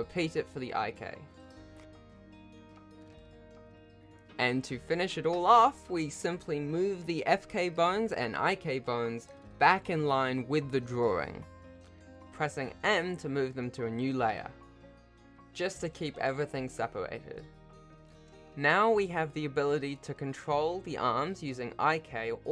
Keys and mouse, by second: 0.1 n, 0.2 shift+click, 0.6 shift+click, 1.0 ctrl+alt+shift+a, 1.2 Tab, 1.5 alt+p, 2.0 s, 2.2 ctrl+Tab, 2.3 alt+a, 3.1 ctrl+shift+z, 3.5 alt+a, 4.5 ctrl+alt+shift+a, 4.9 shift+middle click, 5.0 ctrl+s, 5.1 Tab, 5.5 click, 7.0 shift+middle click, 7.6 g, 9.8 m, 12.2 click, 14.2 m, 16.3 g, 19.1 m.